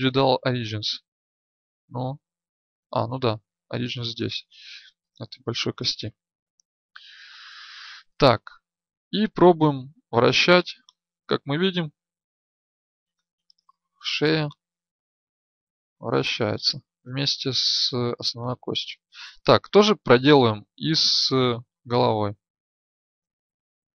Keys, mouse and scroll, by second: 10.3-12.9 drag, 18.9 ctrl+z, 21.6 click, 21.9 click, 22.2 right click.